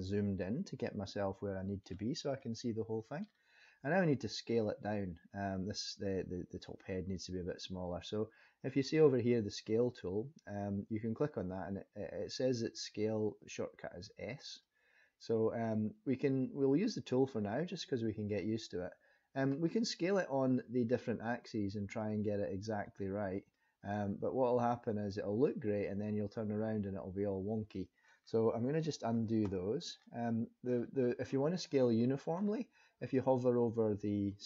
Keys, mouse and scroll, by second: 0.0-0.7 scroll up 1, 0.9 shift+middle click, 2.4 middle click, 14.5 click, 21.2 click, 22.9 click, 24.6 click, 25.9 middle click, 28.9 ctrl+z, 29.1 ctrl+z, 29.5 ctrl+z, 30.0 middle click, 32.0 middle click.